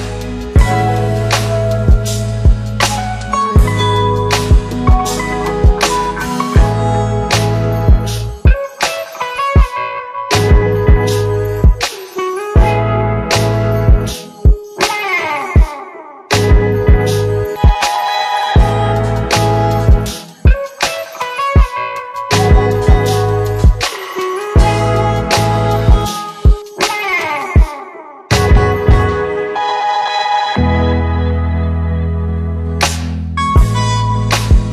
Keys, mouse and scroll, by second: 0.8-2.0 click, 5.4 click, 5.9 scroll up 1, 6.0-6.5 scroll down 1, 6.5-7.1 middle click, 11.1 click, 16.9 click, 18.5 click, 18.9 shift+click, 20.7-21.9 typing, 22.2 Return, 22.9 click, 26.0 click, 28.1 click, 29.6 click, 34.5 click.